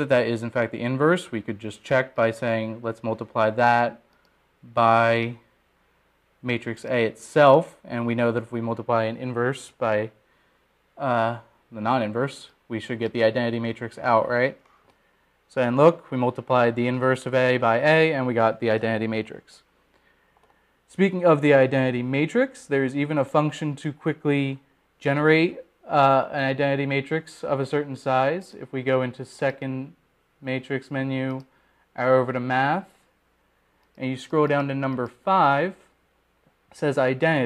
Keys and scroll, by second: 5.2 *, 9.5 Return, 16.0 Return, 34.0 Right, 36.8 Down.